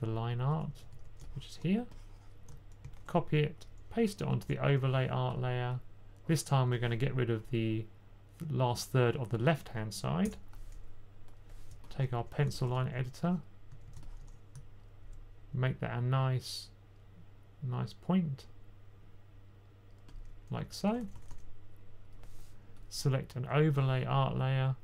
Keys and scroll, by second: 0.0-0.8 typing, 2.7 super+c, 4.2 super+v, 12.0-14.1 typing, 20.8-21.2 typing.